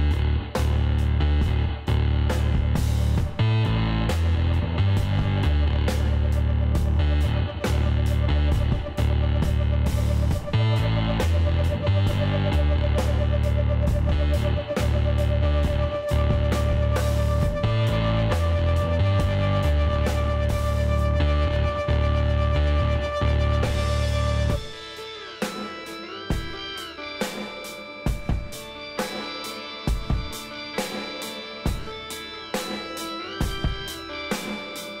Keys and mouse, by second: 5.9-8.6 middle drag, 6.2 a, 8.8 middle click, 9.4-13.0 middle drag, 13.5-17.1 drag, 18.1 alt+m, 20.2-22.5 drag, 22.7 alt+m, 24.1 a, 27.4 ctrl+z, 27.9 ctrl+z, 28.5 ctrl+z, 28.8 ctrl+z, 29.1 ctrl+z, 29.4 ctrl+z, 30.9 KP_1, 31.6 KP_3, 32.6 z, 33.5 middle click, 34.3-35.0 drag, 34.4 b.